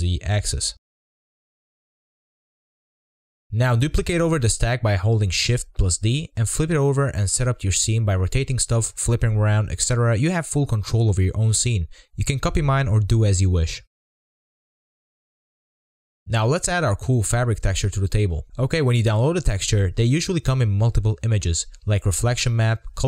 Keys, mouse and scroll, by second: 0.1 s, 2.8 scroll up 2, 3.0-7.1 typing, 3.8 click, 4.4 middle drag, 4.5-5.0 scroll up 4, 4.5 middle drag, 4.9 middle click, 5.0 click, 5.0 shift+middle click, 5.2 scroll down 1, 5.3 middle click, 5.3 click, 5.3 middle click, 5.5 middle click, 6.0 click, 6.6 shift+middle click, 6.8 scroll down 2, 7.3 click, 7.3-7.9 scroll up 5, 7.6 click, 8.0 click, 8.2-15.2 typing, 8.4 click, 8.4 scroll down 1, 9.3 click, 9.4 scroll up 1, 10.3 scroll up 7, 10.3 shift+middle click, 10.7 scroll down 11, 10.8-11.4 scroll up 8, 11.5 middle click, 11.8 shift+middle click, 12.1 scroll down 5, 12.2-12.9 scroll up 4, 12.6 shift+middle click, 13.2 scroll down 2, 13.3 scroll up 7, 13.4 middle click, 13.5 shift+middle click, 13.6 scroll down 1, 14.0 shift+middle click, 14.0 scroll up 1, 14.1 shift+middle click, 14.2 middle click, 15.0 middle click, 15.1 scroll down 6, 15.3 scroll up 1, 15.5 click, 15.7 click, 15.7 scroll down 2, 15.7-16.5 scroll up 1, 16.5 click, 19.8-20.7 drag, 20.7-21.4 scroll down 2, 21.4 scroll down 4, 21.5-22.3 shift+middle drag, 22.3-22.9 scroll up 3.